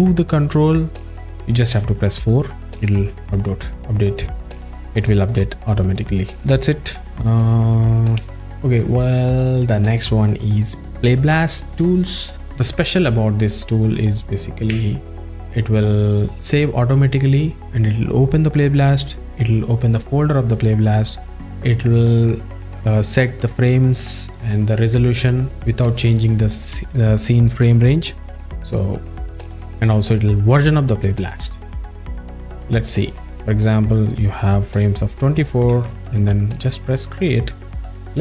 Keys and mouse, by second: 6.1 alt+shift+middle click, 6.7 alt+shift+middle click, 8.4-27.1 drag, 27.6 click, 32.0 click.